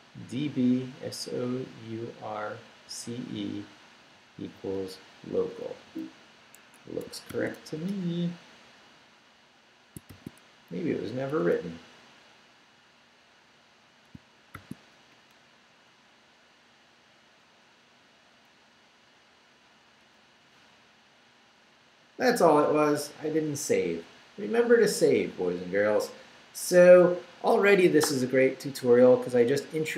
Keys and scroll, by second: 0.6 Right, 6.6 Escape, 7.1 shift+Escape, 7.3 shift+;, 7.6 shift+q, 7.9 Return, 10.1 shift+;, 10.9 shift+w, 11.3 q, 11.5 Return, 14.5 shift+;, 15.1 shift+Up, 15.8 Up, 20.0 Return.